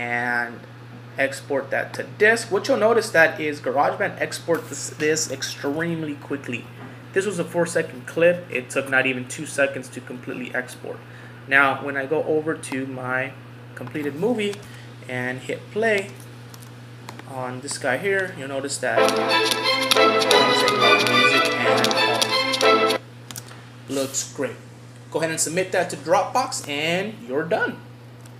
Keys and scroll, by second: 9.9 F11, 16.6 super+w.